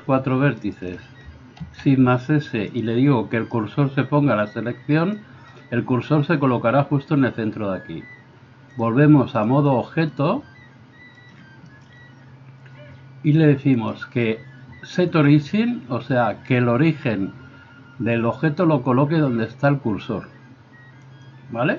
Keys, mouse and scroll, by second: 1.6 shift+s, 8.8-21.7 drag.